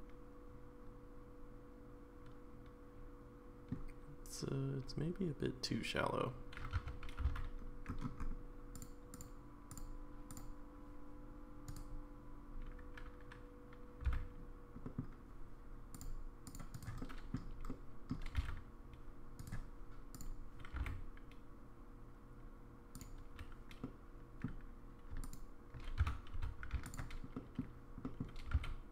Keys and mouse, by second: 6.8 3, 7.2 c, 14.0 c, 17.0 middle click, 17.7 middle click, 18.3 g, 20.1 click, 20.7 g, 23.9 middle click, 25.2 alt+click, 26.4 1, 26.4 2, 26.8 alt+click, 27.4 middle click, 28.0 middle click, 28.5 g.